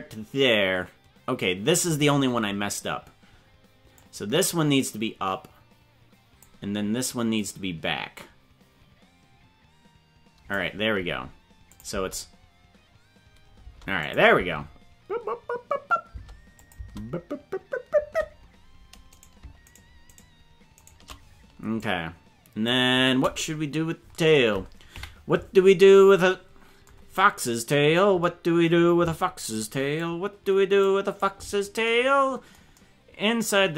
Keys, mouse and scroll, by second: 3.9-6.5 drag, 7.4 right click, 8.1-10.5 drag, 11.7 click, 11.8 space, 13.6 space, 14.0 click, 14.3 space, 16.1 space, 16.5 click, 16.7 space, 17.9 space, 19.1 right click, 19.7 shift+right click, 20.1 right click, 21.0 right click, 21.7 click, 24.9 KP_Decimal, 27.7 scroll down 4, 30.0 click.